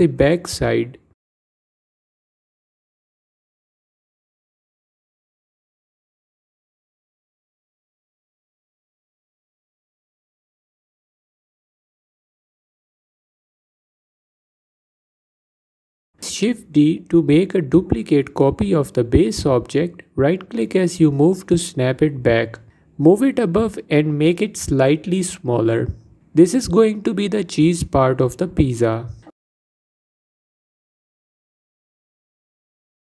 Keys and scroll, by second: 18.3 shift+d, 25.5 s.